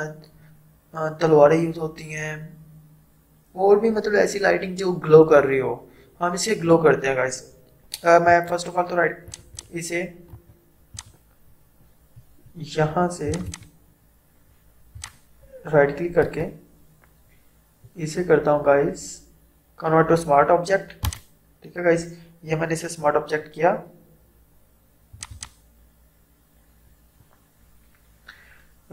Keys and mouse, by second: 8.3 right click, 9.3 click, 10.3 right click, 11.0 click, 13.3 click, 16.3 right click, 21.1 click, 25.2 click.